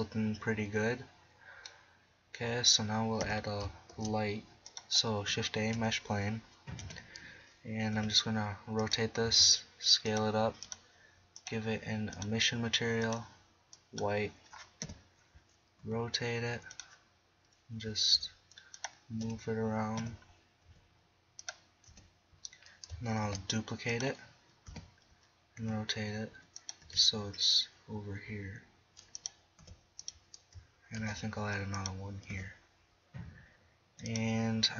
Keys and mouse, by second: 0.0-1.5 middle drag, 3.2 KP_7, 3.9 shift+a, 5.8 KP_1, 6.8 KP_3, 8.0 r, 9.2 s, 14.8 KP_7, 15.8 r, 17.1-18.1 drag, 18.1 g, 19.3 KP_1, 20.0 KP_3, 20.6 g, 21.9 KP_1, 23.3 shift+d, 24.0 click, 24.7 KP_7, 25.6 r, 26.9 g, 28.6 click, 29.6 r, 31.0 shift+d, 31.8 drag, 32.3 r.